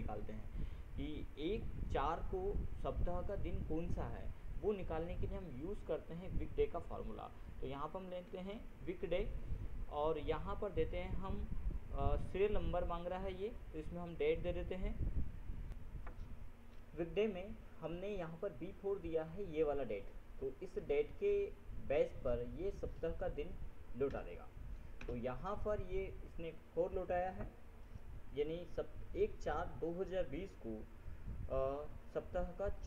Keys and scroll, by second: 6.9 ctrl+w, 8.5 ctrl+Tab, 15.9 ctrl+F7, 25.2 ctrl+Return.